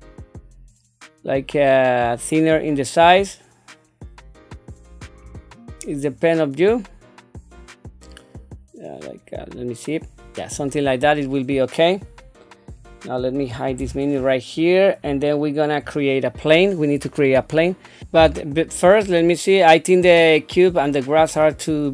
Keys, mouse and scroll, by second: 3.8-5.1 drag, 6.0-10.5 drag, 13.7 n, 18.0 click, 20.2-21.4 drag.